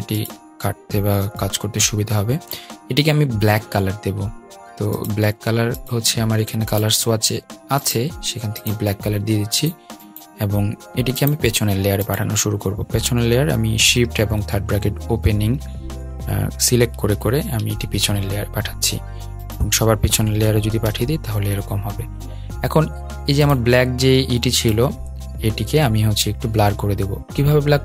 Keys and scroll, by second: 13.0 super+{, 20.6 super+}.